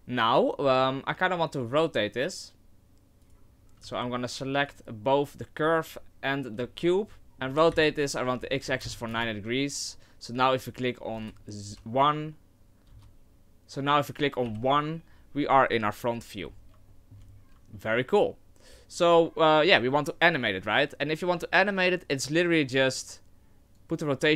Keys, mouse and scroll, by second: 3.2 right click, 3.8 z, 4.7 shift+right click, 6.6 z, 7.2 ctrl+z, 7.2 middle click, 7.2 KP_1, 7.5 r, 11.1 KP_0, 11.7 KP_1, 12.9 KP_0, 14.4 KP_1, 16.5-16.9 scroll up 3, 16.9 shift+middle click, 17.3 scroll up 1, 17.7 shift+middle click, 18.1 right click, 23.8 click.